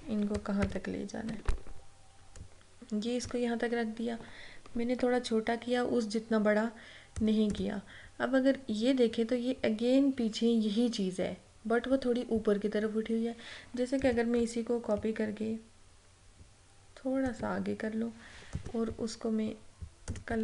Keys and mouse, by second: 0.7 ctrl+-, 2.5-5.6 drag, 7.6 click, 14.1 click, 15.1-18.6 alt+drag, 18.6 right click, 20.2-20.4 drag.